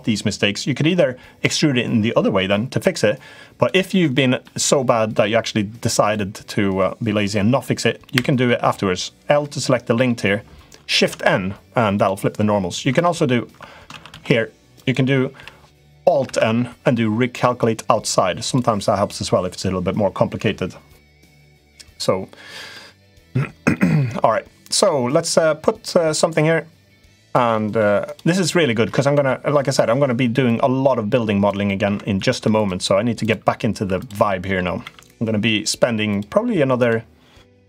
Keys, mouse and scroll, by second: 0.3-3.4 drag, 3.9 middle click, 9.3 middle click, 10.8 shift+n, 11.7 click, 12.7 ctrl+z, 13.7 ctrl+z, 13.9 ctrl+z, 14.5 click, 15.1 l, 16.0 alt+n, 18.3 click, 22.5 middle click, 23.5 middle click, 24.5 click, 26.0-27.1 drag, 27.4 middle click, 28.9 ctrl+z, 29.3 middle click, 30.2 click, 31.5 middle click, 31.9 ctrl+r, 33.7 3, 33.7 click, 34.0 middle click, 34.6 e, 36.6 click.